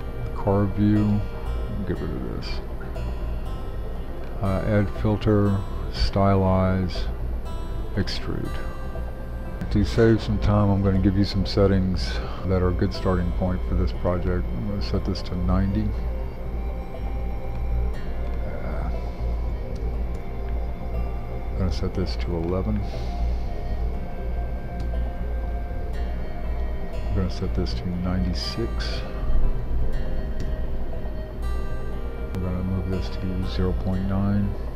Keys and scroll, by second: 9.1 shift+super+3, 19.5-20.9 typing, 20.1 Return, 23.9-24.4 typing, 24.8 Return, 29.3-30.9 typing.